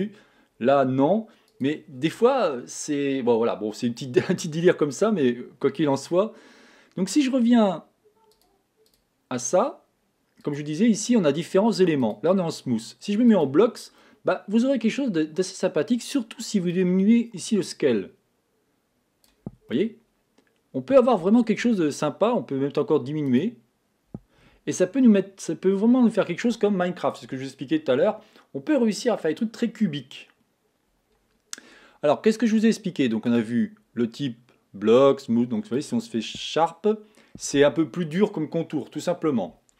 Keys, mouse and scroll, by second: 1.9 click, 8.9 click, 12.6 click, 14.4 middle click, 15.2 scroll up 2, 17.1 click, 20.1-22.0 middle drag, 22.0 scroll up 1, 23.6 click, 24.8-25.4 scroll down 4, 25.4-26.6 middle drag, 26.6 scroll up 1, 33.7 click, 37.0-39.7 middle drag.